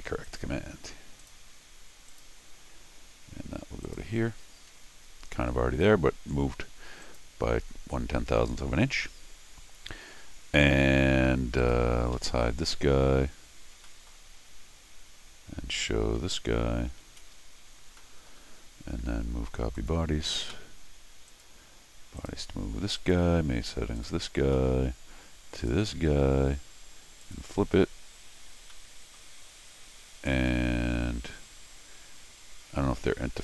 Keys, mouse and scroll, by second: 0.2 click, 1.2 click, 2.1 click, 3.8 click, 7.0 click, 11.6 click, 12.2 Tab, 13.9 middle click, 14.3 Tab, 17.0 shift+Tab, 18.0 middle click, 18.8 Escape, 19.8 click, 21.3 click, 22.2 click, 24.0 click, 24.5 middle click, 25.6 click, 27.2 click, 28.7 middle click.